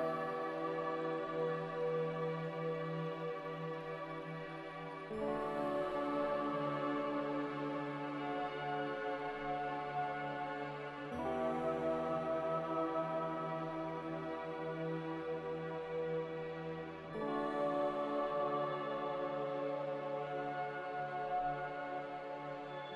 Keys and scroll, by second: 3.6-4.5 typing, 15.1-16.0 typing, 22.1-22.9 typing.